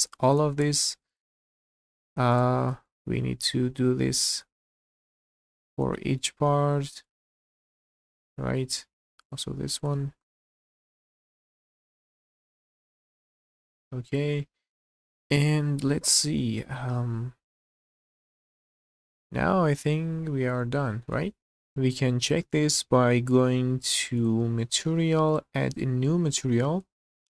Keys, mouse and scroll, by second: 0.0 shift+middle click, 1.1 alt+shift+click, 1.9 ctrl+z, 2.3 alt+shift+click, 2.8-4.1 middle drag, 4.8 alt+shift+click, 5.4 middle click, 5.9 shift+middle click, 7.0 alt+shift+click, 7.5 q, 8.0 scroll down 1, 8.2 middle click, 9.2 alt+click, 9.9 ctrl+z, 10.1 scroll up 2, 10.3 shift+middle click, 10.9 alt+click, 11.2 scroll down 2, 11.3 shift+middle click, 11.4 middle click, 11.6 scroll up 3, 11.7 shift+middle click, 12.1 alt+shift+click, 12.2 scroll down 1, 12.2 middle click, 12.4 scroll up 1, 12.7 alt+shift+click, 12.9 middle click, 13.1 q, 13.4-14.1 scroll down 1, 14.1 click, 14.4 middle click, 15.3-16.4 middle drag, 16.6 middle click, 17.7-22.0 middle drag, 21.6 scroll down 1, 22.4 shift+middle click, 24.2 click, 25.3-27.0 drag, 27.0 scroll down 3.